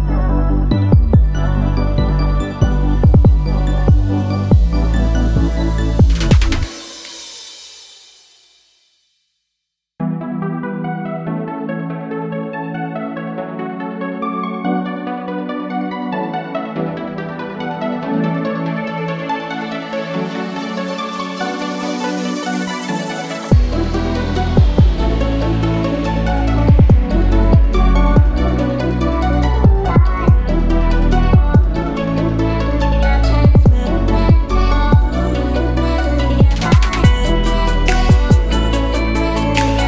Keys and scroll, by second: 4.0-5.0 typing, 5.3 shift+Return, 6.2 Return, 17.9-19.4 typing, 20.2 Return, 33.1-34.4 typing, 35.1 Return.